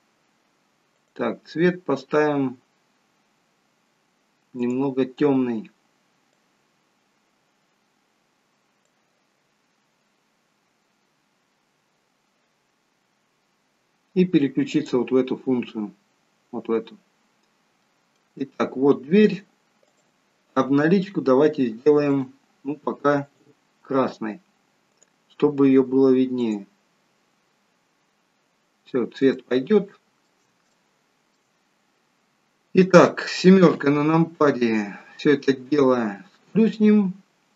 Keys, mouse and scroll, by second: 4.5 click, 16.4 click, 17.3-18.2 scroll up 2, 17.8 middle click, 18.4 shift+middle click, 19.8 click, 22.1 click, 30.4 shift+middle click, 31.4 shift+middle click, 34.2 KP_7, 36.5 click.